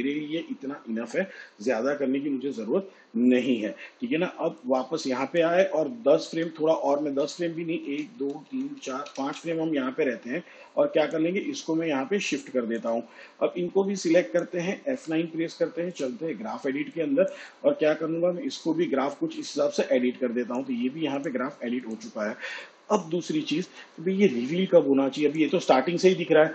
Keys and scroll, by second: 6.7 shift+Page_Down, 8.2 ctrl+Left, 15.3 F9.